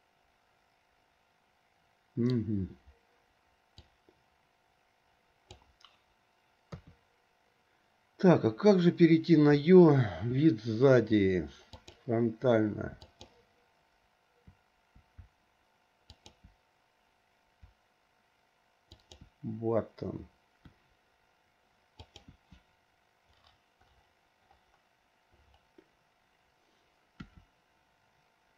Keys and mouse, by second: 3.9 click, 4.3-5.8 drag, 6.9 KP_3, 15.3 `, 17.8 `, 20.8 `, 22.8 `.